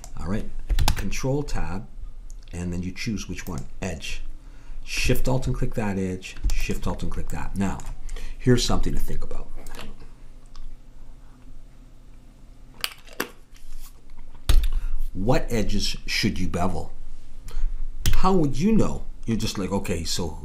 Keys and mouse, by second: 0.9 ctrl+Tab, 5.2-8.3 drag, 8.3-11.3 middle drag, 18.1 a, 19.5 middle click.